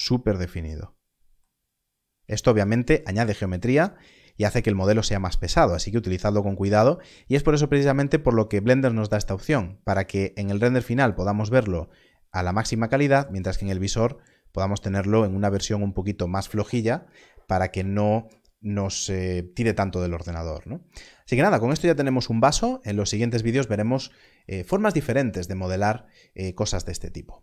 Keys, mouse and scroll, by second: 0.6 click, 1.5-2.1 scroll down 1, 10.6 click, 13.2 click, 21.8 click.